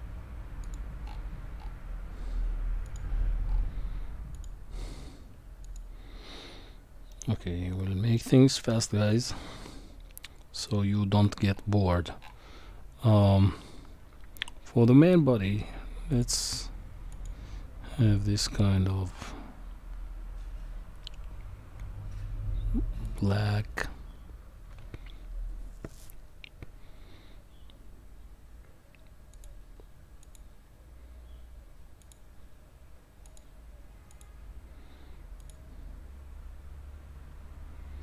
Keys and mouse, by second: 0.6 click, 2.9 click, 4.3 click, 7.1-8.2 middle drag, 10.6 click, 16.1 click, 23.1 click, 29.3-30.3 drag, 32.0 click, 33.3 click, 35.4 click.